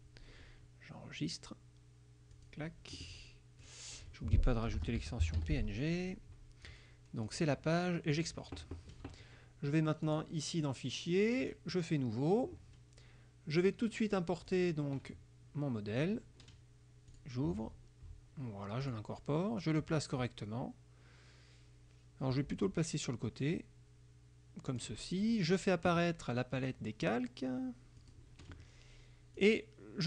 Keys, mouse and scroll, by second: 0.0-0.1 typing, 2.4 click, 3.7 click, 4.6-6.0 typing, 7.3 click, 8.2 click, 10.1 click, 11.5 click, 13.7 click, 14.6 click, 16.1 click, 17.2 click, 18.9 click, 19.7-25.1 drag, 26.7 click, 28.1 click, 29.5 click.